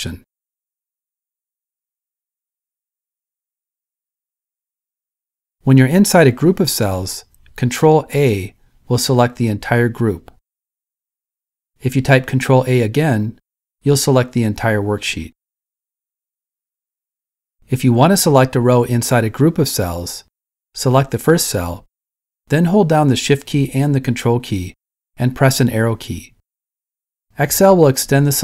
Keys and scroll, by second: 7.5 super+a, 13.8 super+a, 26.3 Right, 26.3 Left.